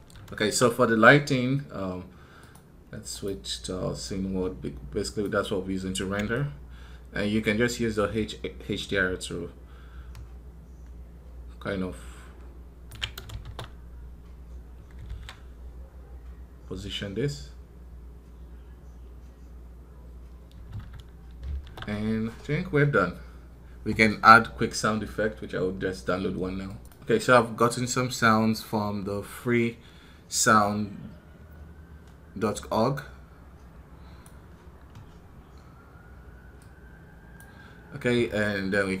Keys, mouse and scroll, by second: 28.8-39.0 drag.